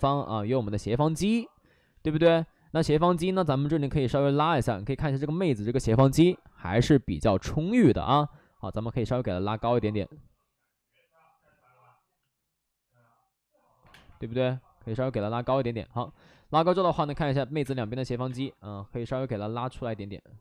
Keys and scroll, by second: 0.8 space, 1.1 2, 2.1 space, 2.8 space, 5.4 space, 6.8 space, 13.8 3, 13.8 space, 14.0 3, 16.0 alt+s, 16.7 space, 17.0 3, 17.5 space, 18.2 space.